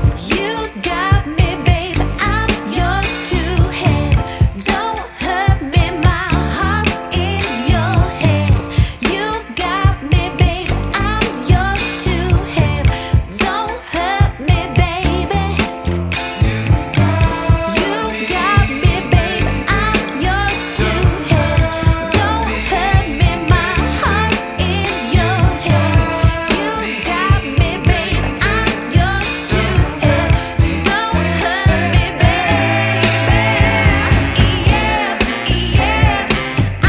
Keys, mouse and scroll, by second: 1.7 click, 6.4 click, 6.5 F10, 8.3 click, 12.0 click, 16.5 click, 17.5 click, 19.9 ctrl+shift+click, 21.3-21.8 scroll up 2, 21.8-22.9 scroll down 2, 23.6 click, 24.1 click, 25.4 shift+a.